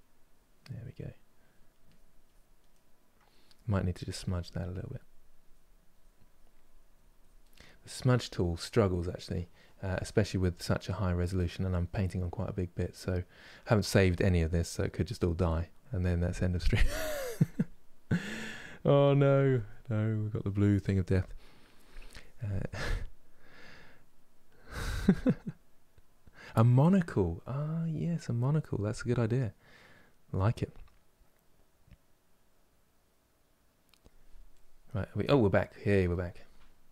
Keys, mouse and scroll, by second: 1.7 click, 2.4-3.8 middle drag, 3.8-23.8 drag, 23.8-36.9 middle drag.